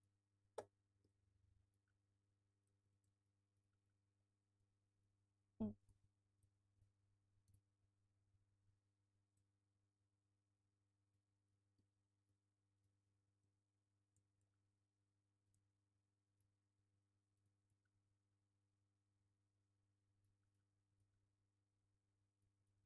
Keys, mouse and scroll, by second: 0.7 scroll up 2, 0.8-1.8 middle drag, 1.0 alt+s, 1.8 scroll down 1, 2.0-2.3 scroll up 1, 2.3 g, 2.6 click, 2.7 scroll down 1, 2.8 Tab, 3.0-6.8 alt+middle drag, 4.1 alt+z, 4.8 F3, 4.9 scroll up 1, 6.4 ctrl+a, 6.6 scroll up 1, 6.8 click, 7.0-11.1 middle drag, 7.5 shift+d, 8.1 Escape, 8.3 scroll up 1, 8.5 scroll down 1, 9.4-9.8 scroll up 1, 9.8 s, 11.1 click, 11.5 ctrl+z, 12.9 shift+click, 13.1-14.5 alt+middle drag, 13.2 Tab, 13.4 a, 13.7-14.5 scroll up 1, 14.5-15.4 scroll down 1, 15.4 Tab, 16.4 w, 16.5 scroll down 1, 16.7-20.2 alt+middle drag, 16.9 alt+q, 17.4 Tab, 18.1 alt+q, 18.7 Tab, 19.3 alt+q, 19.7-20.2 scroll up 1, 20.2 click, 20.4 alt+middle click, 20.5 scroll down 1, 20.7 scroll up 1, 21.0 ctrl+click, 21.1-22.8 middle drag, 21.2 w, 22.6 Tab.